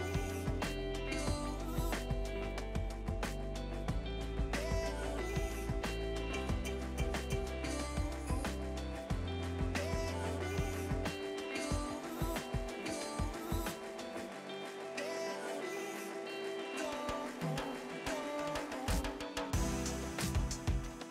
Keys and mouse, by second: 0.0 click, 0.7 shift+w, 1.1 e, 1.9 click, 6.2 w, 6.8 a, 7.7 click, 9.8 w, 10.2 a, 10.8 click.